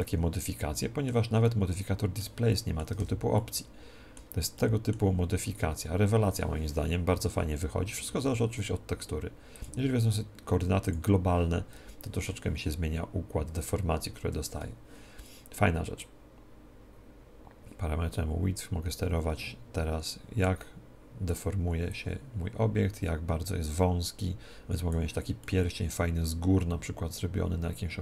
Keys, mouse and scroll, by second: 2.9 alt+a, 9.5-14.3 drag, 14.3 Escape, 16.0-25.4 drag, 25.4-27.2 middle drag.